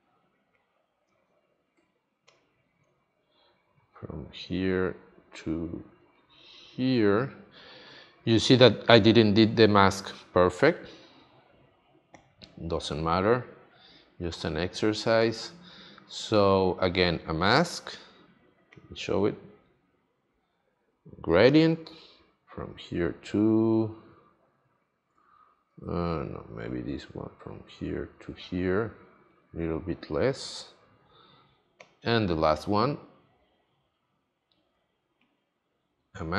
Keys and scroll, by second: 25.6 super+z.